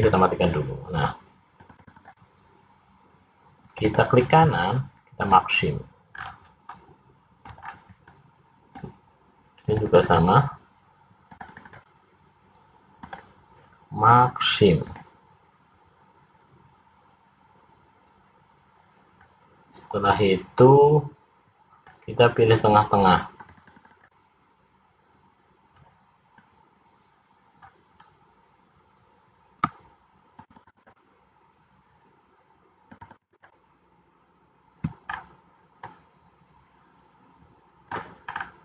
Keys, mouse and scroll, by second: 0.3 click, 1.7 click, 2.5 click, 3.8 right click, 6.2-6.8 scroll down 5, 6.8 middle click, 7.7-8.1 scroll down 1, 8.3 middle click, 9.9 click, 10.3 click, 10.7 click, 11.4 click, 12.3 click, 13.1 right click, 19.3 middle click, 23.5-24.3 click, 26.5 middle click, 28.1 scroll up 1, 30.5 shift+click, 31.5 shift+click, 35.1 shift+click, 35.2-36.1 scroll down 3, 36.1 middle click, 38.5-38.6 scroll down 2.